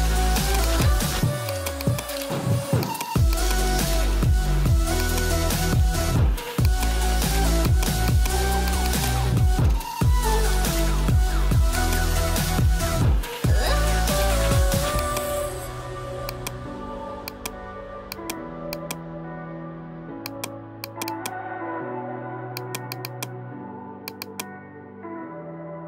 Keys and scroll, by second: 24.8-25.8 typing.